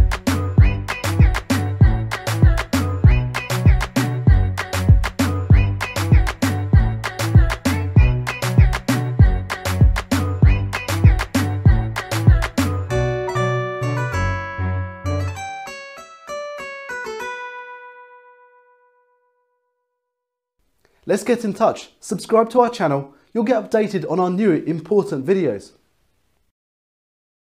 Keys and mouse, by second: 4.1-4.8 typing, 4.3 click, 6.5 Up, 9.3 click, 12.2 shift+F5.